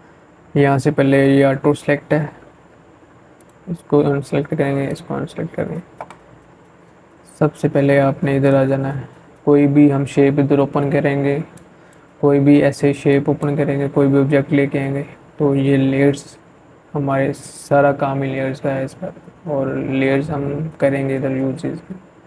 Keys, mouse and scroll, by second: 1.2 click, 6.3 click, 9.3-10.9 drag, 22.0 click.